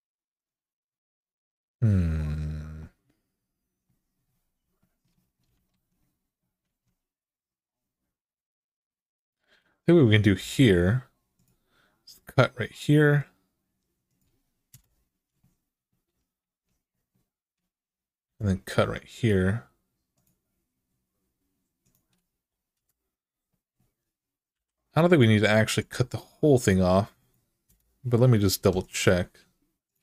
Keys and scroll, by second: 5.5 alt+z, 6.4 alt+z, 10.2 k, 14.5 Return, 18.0 k, 20.6 k, 22.5 Return, 24.3 k, 27.4 Return, 28.4 Return, 29.9 x.